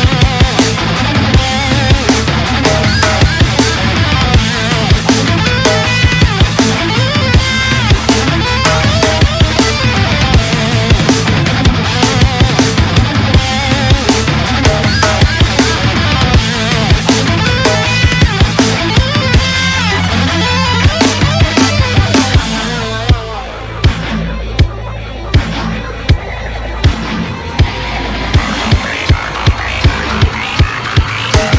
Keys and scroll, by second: 2.3 ctrl+u, 11.2 Return, 24.7 ctrl+g.